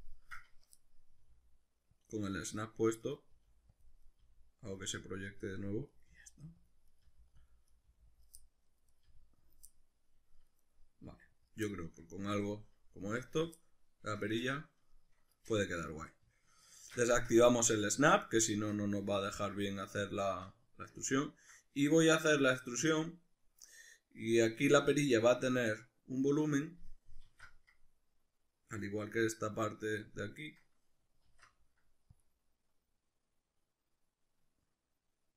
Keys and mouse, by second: 1.2 g, 2.1 click, 2.3 middle click, 3.0 right click, 3.3 g, 3.8 click, 4.0 right click, 4.2 g, 4.8 click, 5.1 right click, 5.3 g, 5.7 click, 5.9 right click, 6.1 g, 6.7 click, 6.9 right click, 7.0 g, 7.5 click, 7.7 right click, 7.9 g, 8.2 click, 8.4 middle click, 8.9 right click, 9.0 g, 9.6 click, 9.7 middle click, 10.6 right click, 11.0 g, 11.5 click, 11.7-13.8 ctrl+middle drag, 16.0 a, 16.7 shift+Tab, 18.4-35.3 shift+middle drag, 27.3 alt+e.